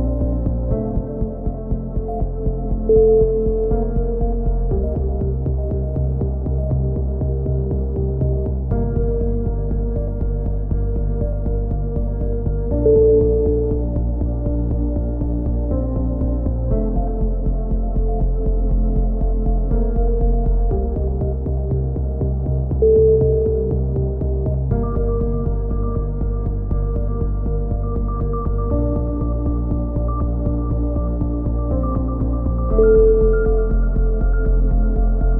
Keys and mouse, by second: 0.2 click, 1.3 ctrl+r, 5.6 a, 6.1 c, 6.9 click, 8.4 a, 8.9 ctrl+r, 10.0 a, 10.5 c, 11.5-12.5 drag, 13.2 a, 13.5-14.6 drag, 14.7 ctrl+r, 16.4 a, 16.8 c, 17.3-18.7 drag, 19.2 a, 19.9-21.8 drag, 26.4 KP_3, 27.4 KP_7, 28.2 click, 29.8-30.9 drag, 31.9 Tab, 32.2 z, 32.7 a, 33.0 click, 35.1 Tab.